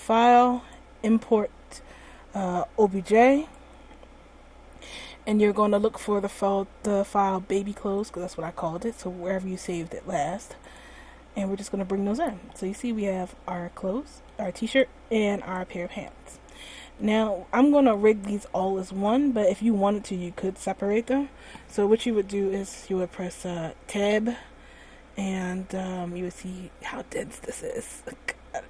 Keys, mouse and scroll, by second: 11.6 click, 12.8 middle click, 14.8 right click, 15.7 right click, 17.2 middle click, 17.3 middle click, 17.7 middle click, 20.2-20.8 scroll up 1, 23.9 Tab, 26.4-26.9 scroll up 2, 28.1 scroll down 1.